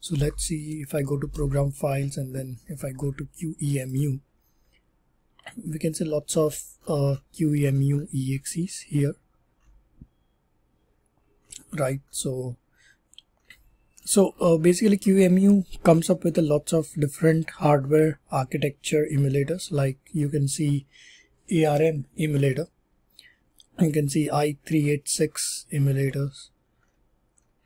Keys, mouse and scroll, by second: 0.0-0.8 typing, 1.1 Return, 2.5-3.2 typing, 3.7 click, 3.9 click, 5.5-7.7 scroll, 7.9-8.9 scroll down 20, 9.5-11.3 scroll down 5, 11.3 scroll, 11.3-11.9 scroll down 12, 11.9-13.0 scroll down 2, 13.3 scroll down 1, 13.4-13.9 scroll, 13.9-15.0 scroll up 10, 16.3 scroll up 1, 16.4 scroll down 1, 17.4-18.1 scroll down 1, 18.1 scroll down 1, 18.5-20.0 scroll up 1, 20.1 scroll down 1, 21.6 click, 23.3 scroll up 1, 23.5-25.1 scroll down 1, 25.1 click, 25.1-26.3 scroll, 26.3-27.6 scroll.